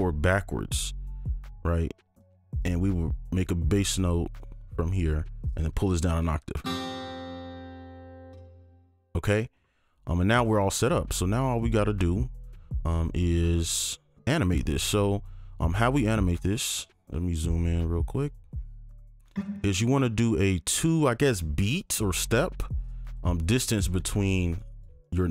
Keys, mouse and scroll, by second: 1.6-2.2 scroll down 1, 2.2 shift+click, 3.9 right click, 4.4 ctrl+click, 5.6-6.5 ctrl+scroll down 2, 8.3 space, 9.4-10.0 scroll up 1, 16.0-18.5 scroll up 1, 18.5-20.2 scroll down 1, 21.8 alt+click, 22.4 ctrl+click, 23.1 shift+click, 25.0 right click.